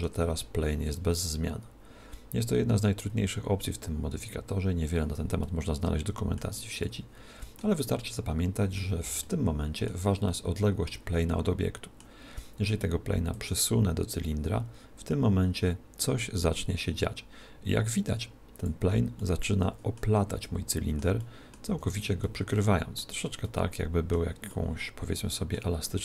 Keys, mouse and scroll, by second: 5.4-13.4 middle drag, 13.4 click, 19.2-26.0 middle drag, 20.2 z, 21.2 z, 21.7 z.